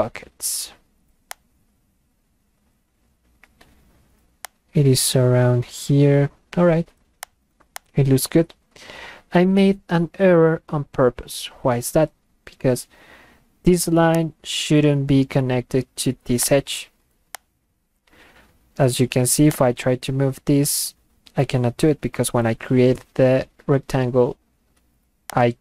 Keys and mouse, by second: 1.3 click, 4.4 click, 7.2 click, 7.7 click, 14.2 click, 16.4 click, 17.3 click, 19.5-22.8 drag, 25.3 click.